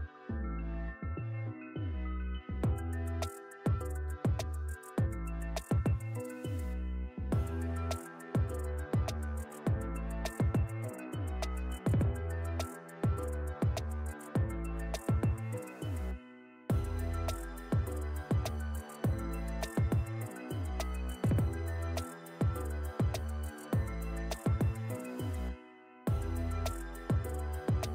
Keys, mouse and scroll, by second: 2.1 click, 4.9 scroll down 1, 5.2 scroll up 1, 5.4 scroll down 1, 5.6 scroll up 1, 7.5 scroll down 1, 8.1 click, 8.9 right click, 9.7 click, 10.1 alt+Tab, 11.1 ctrl+v, 11.5-11.8 click, 12.7 ctrl+shift+], 13.4 shift+click, 13.8 right click, 14.3 click, 16.6-17.3 shift+drag, 20.3 ctrl+space, 20.4 ctrl+click, 20.6-21.3 ctrl+space, 21.4 click, 24.0 click, 25.6 click.